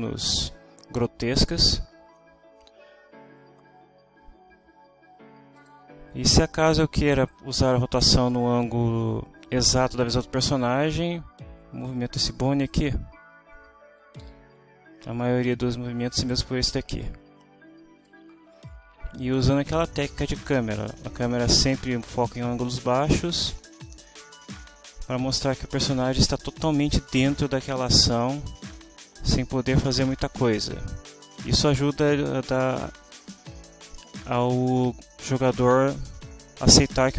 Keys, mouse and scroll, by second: 5.6 click, 7.1 middle click, 11.1 r, 14.2 Escape, 16.1 middle click, 18.1-26.8 drag, 27.8-33.3 drag.